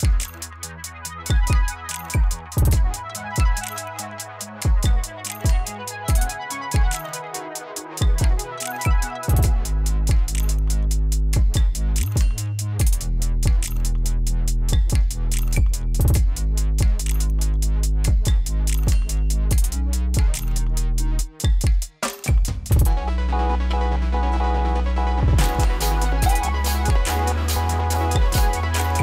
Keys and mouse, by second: 2.9 ctrl+c, 4.5 click, 5.3 ctrl+c, 6.6 click, 8.7 space, 13.2 space, 13.5 click, 14.8 ctrl+a, 15.9 ctrl+shift+x, 18.4-20.5 typing, 21.1 Return, 23.3 ctrl+Return, 25.8 click, 27.3 ctrl+d, 27.9 click.